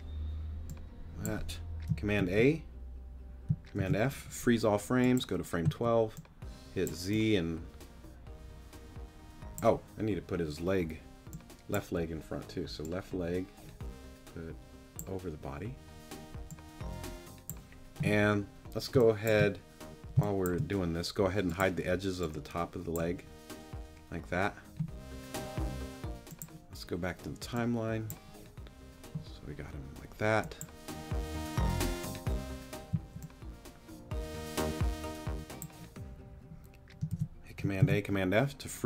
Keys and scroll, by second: 2.2 super+a, 3.8 super+f, 5.6 z, 18.9 space, 20.1 space, 32.9 z, 37.1 super+a, 37.8 super+f.